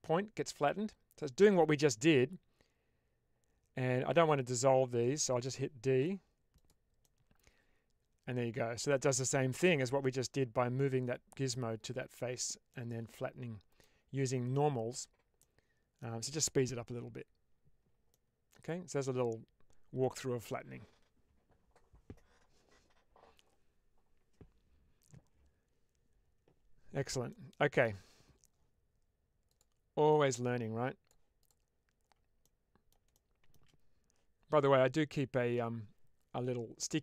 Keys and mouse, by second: 5.9 d, 6.4 click, 6.9-9.6 middle drag, 12.7-13.7 middle drag, 15.4 middle click, 18.1-19.9 middle drag, 27.2 middle click, 29.4 click, 30.1-31.1 drag, 31.3 click, 32.4 middle click, 33.0 shift+middle click.